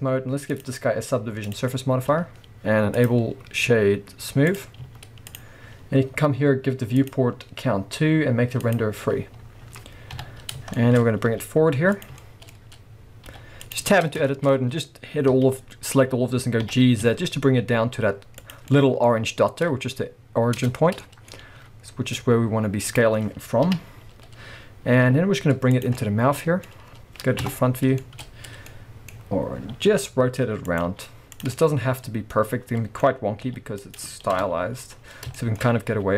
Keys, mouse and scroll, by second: 0.5-10.7 drag, 1.9-3.0 scroll down 2, 4.8 z, 9.2-9.6 scroll down 2, 9.6-10.1 scroll up 1, 10.1 KP_3, 10.7-12.1 shift+middle drag, 11.1 scroll up 2, 11.2 g, 12.1 click, 12.2-13.8 shift+middle drag, 12.5 scroll up 1, 13.3 g, 13.8 click, 13.9 Tab, 14.3-18.5 shift+middle drag, 15.3 a, 16.6 g, 18.5 click, 18.7-20.6 middle drag, 19.1-20.6 scroll up 2, 20.6 Tab, 20.7-21.0 scroll down 2, 20.8 middle click, 21.3-21.6 scroll up 2, 21.6 s, 22.9 click, 23.7 KP_3, 24.3-24.9 scroll up 2, 24.9 g, 25.8 click, 26.0-30.8 middle drag, 27.4 KP_0, 28.2-28.7 scroll up 2, 29.1-29.9 scroll up 2, 29.9 r, 30.8 click, 30.9 g, 31.4 click, 31.6-33.9 middle drag, 33.4 g, 33.9 click, 34.3 KP_0, 34.9 scroll up 2, 35.4 shift+middle click, 35.6 scroll up 3, 35.9 s.